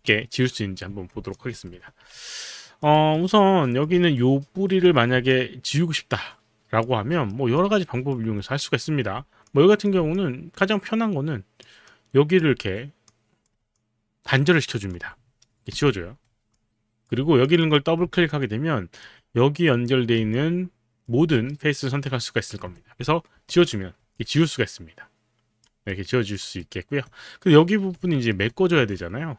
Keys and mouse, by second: 1.4 alt+click, 1.8 5, 3.0 alt+click, 3.0 alt+right click, 3.3 alt+right click, 3.7 alt+click, 4.2 right click, 4.2 alt+click, 4.9 click, 5.3 alt+click, 6.2 alt+click, 7.1 middle click, 7.6 alt+click, 8.3 alt+middle click, 9.4-10.7 drag, 13.1 click, 13.7 alt+click, 15.7 Delete, 16.6 alt+click, 17.4 click, 17.7 click, 18.1 alt+click, 20.4 alt+click, 24.1 alt+click, 25.9 alt+middle click, 26.3 alt+right click, 28.1 alt+middle click, 29.0 alt+click.